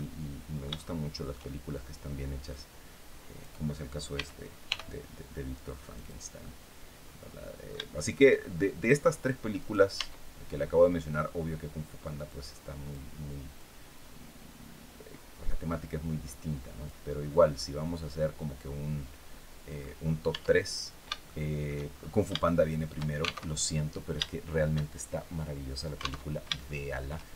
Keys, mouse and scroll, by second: 2.2-3.3 drag, 3.8 s, 4.3 y, 5.6 click, 6.1-7.5 middle drag, 7.6-8.7 shift+middle drag, 9.2 right click, 9.6 Tab, 11.9 click, 13.2-16.7 drag, 17.2 scroll down 1, 17.6-19.7 middle drag, 20.0 Tab, 20.4-20.7 scroll down 1, 20.9 shift+middle click, 21.6-21.9 shift+scroll up 2, 22.1 shift+middle click, 23.1 alt+shift+Tab, 24.6-25.6 shift+drag, 25.9 alt+Tab, 26.3 shift+click.